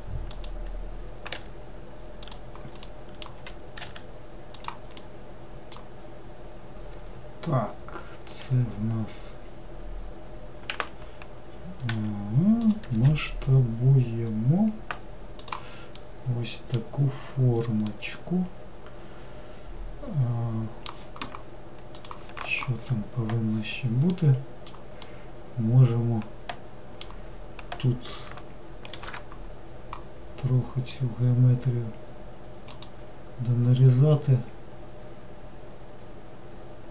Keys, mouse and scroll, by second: 1.4 r, 2.9 middle click, 3.5 w, 3.9 e, 5.0-6.0 middle drag, 6.0 scroll down 1, 8.5 r, 12.0 e, 13.0 s, 16.0-21.0 middle drag, 24.2-28.3 middle drag, 28.9 ctrl+r.